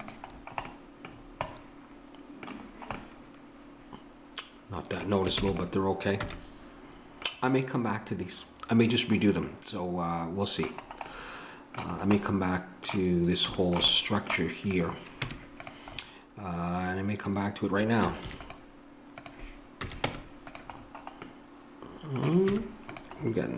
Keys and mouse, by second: 5.3 ctrl+s, 6.3 a, 14.7-16.3 drag, 15.2 Tab, 18.3 ctrl+r, 19.8 a, 20.0 Tab, 22.5 Tab.